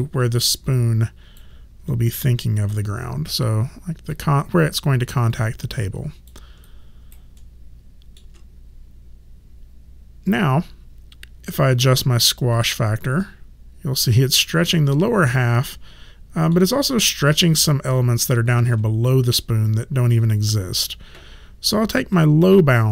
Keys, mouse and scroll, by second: 0.3 alt+click, 5.3 alt+click, 6.6 alt+right click, 7.4 alt+middle click, 11.4 click, 13.2 middle click, 18.6 ctrl+z, 22.0 click.